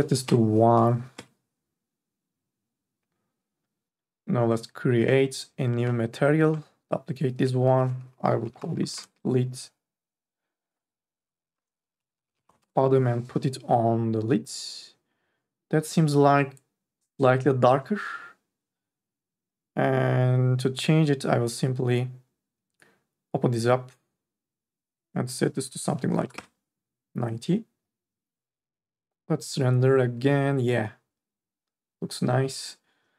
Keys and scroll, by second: 0.4 KP_1, 0.5 Return, 1.1 Return, 8.4 l, 8.9 d, 9.1 Return, 11.8-12.5 typing, 12.7 Return, 26.3 KP_9, 26.5 Return.